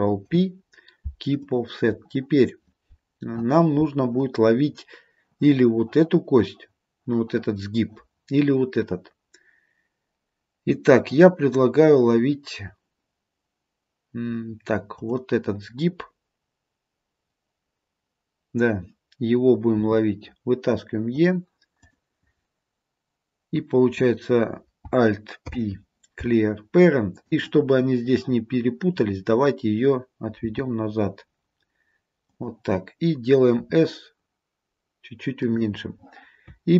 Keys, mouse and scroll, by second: 0.4 ctrl+p, 15.0 click, 19.9 e, 21.9 click, 25.5 alt+p, 30.6 g.